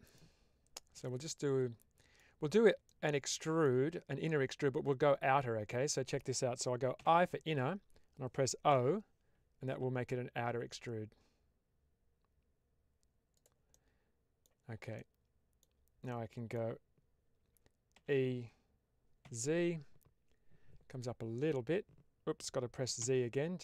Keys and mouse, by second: 0.9-2.1 middle drag, 2.8 middle click, 13.2 click, 13.7 middle click, 14.8 middle click, 16.0 middle click, 17.9 e, 22.9 z.